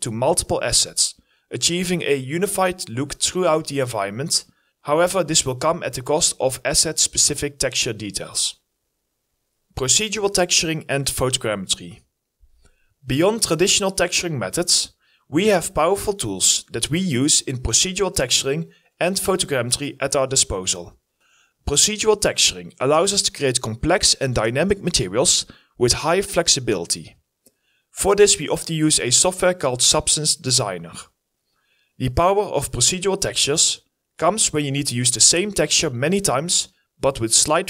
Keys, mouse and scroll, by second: 0.1 w, 0.5 scroll, 0.7 w, 1.4-1.8 scroll down 1, 1.8-6.2 typing, 7.9 s, 8.6 s, 8.9 e, 12.1 double click, 17.3-19.0 typing, 19.2 Return, 20.7 Delete, 20.9 scroll down 1, 24.1-25.5 typing, 29.3-30.3 typing, 30.5 Return.